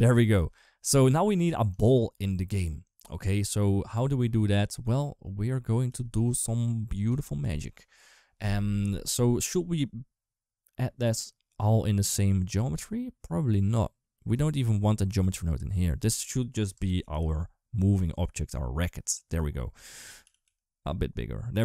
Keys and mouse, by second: 4.5 click, 5.7 g, 15.1 click, 16.5 Tab, 16.7 a, 16.9 s, 20.0 s, 21.5 Tab.